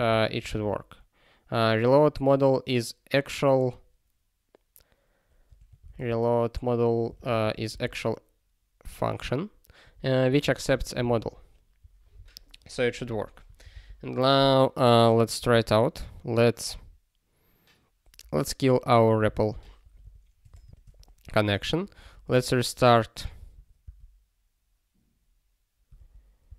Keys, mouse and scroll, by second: 0.4 r, 5.4-6.3 typing, 7.1 alt+f, 7.4 BackSpace, 7.7 ctrl+s, 10.4 alt+f, 10.6 alt+f, 11.5 ctrl+s, 11.8 click.